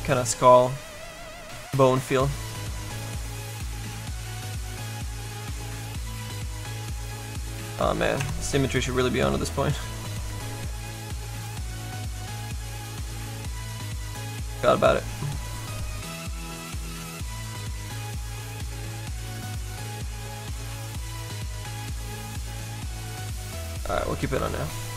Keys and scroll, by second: 6.0 z, 10.1 x, 23.2 x.